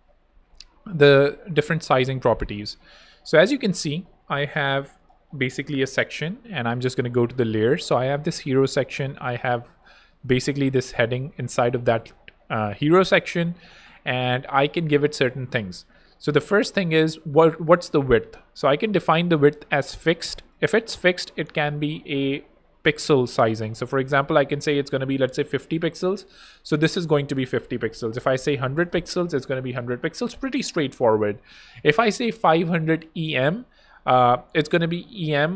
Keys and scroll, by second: 6.5 alt+2, 9.7 BackSpace, 24.7-25.8 typing, 28.0 super+i, 28.1-29.3 typing, 31.1 super+a, 31.2-32.4 typing.